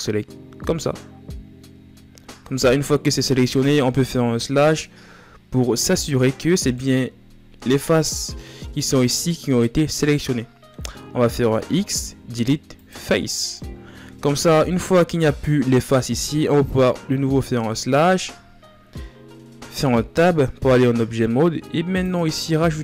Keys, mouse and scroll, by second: 0.4 b, 1.4 z, 1.8-3.1 scroll up 4, 3.1-4.1 shift+right drag, 4.1 KP_Divide, 6.4-7.6 middle drag, 7.6 scroll up 1, 9.4-9.9 scroll down 2, 9.9-12.5 middle drag, 12.5 x, 13.1-14.4 middle drag, 14.4-14.8 ctrl+scroll down 5, 14.8-16.8 middle drag, 16.8 KP_Divide, 18.3-19.4 scroll down 4, 19.4 Tab.